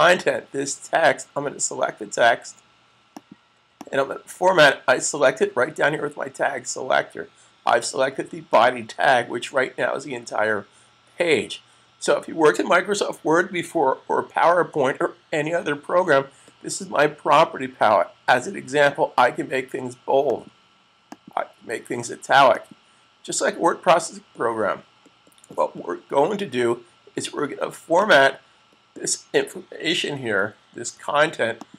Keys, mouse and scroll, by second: 2.9 click, 8.3 click, 20.1 click, 21.3 click, 23.6 click, 27.9 click, 30.1 super+z, 30.7 z, 31.5 click.